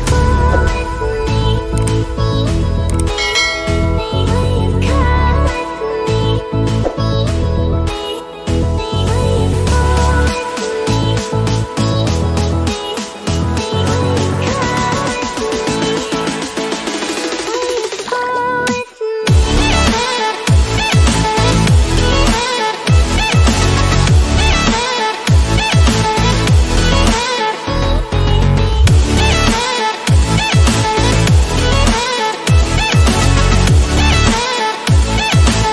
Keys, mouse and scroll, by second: 2.7 click, 2.7 click, 5.6 click, 8.6 click, 12.1-14.8 drag, 14.8-16.4 drag, 34.4 click, 35.4-35.7 alt+drag.